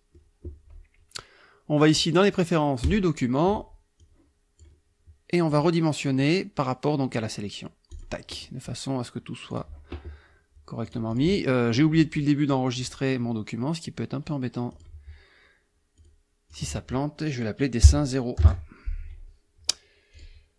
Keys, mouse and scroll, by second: 2.9 click, 4.0 click, 5.5 click, 8.0 click, 9.6 click, 10.9 click, 11.8 click, 12.8 click, 14.8 click, 16.0 click, 16.6 click, 17.9 Right, 18.4 KP_0, 18.5 KP_1, 20.2 click.